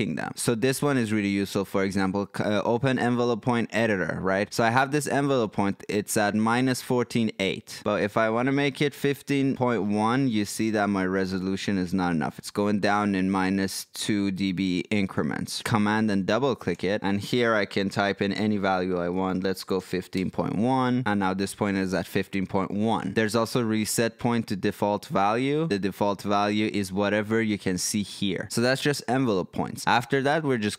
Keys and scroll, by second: 18.4-20.2 typing, 21.0 Return.